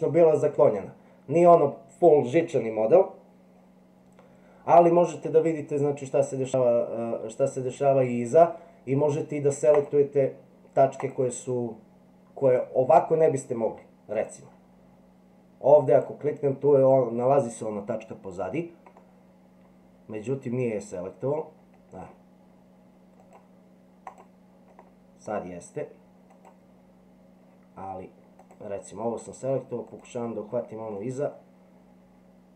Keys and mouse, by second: 9.8 click, 11.0 click, 14.2 click, 16.0 click, 19.0-22.1 middle drag, 23.2 click, 24.8 middle click, 26.4 click, 28.5 click, 30.0 click, 31.0-32.5 middle drag.